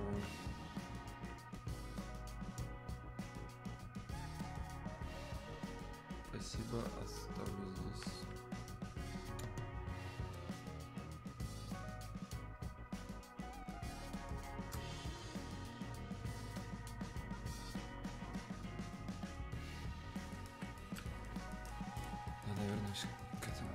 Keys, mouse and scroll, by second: 7.5 click, 11.8 click, 20.9 shift+click.